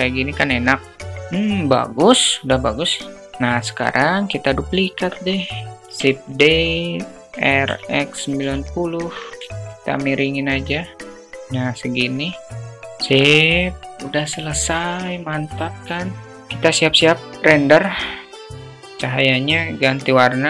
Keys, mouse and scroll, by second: 0.8-3.1 alt+middle drag, 4.5 KP_0, 5.4 click, 6.2 shift+d, 7.2 r, 9.0 alt+shift+middle click, 9.6-11.1 drag, 11.6-12.6 drag, 12.6 KP_0, 13.7 click, 14.8 click, 17.3 click, 17.6-18.5 drag, 19.3 click.